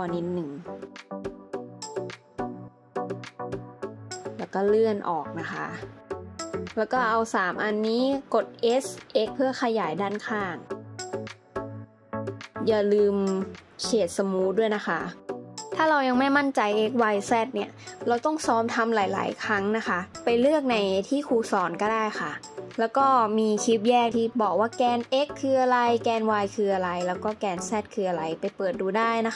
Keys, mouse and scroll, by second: 1.4 scroll up 1, 6.8 shift+click, 8.4 s, 11.2 scroll down 1, 11.4 middle click, 13.3 alt+z.